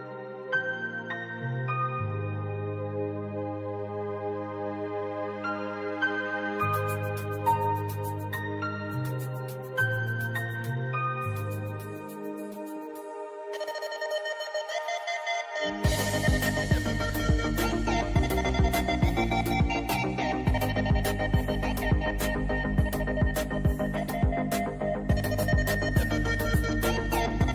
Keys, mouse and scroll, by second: 0.0-2.3 typing, 9.0 space, 12.5 click, 15.0-16.2 drag, 16.2-17.5 drag.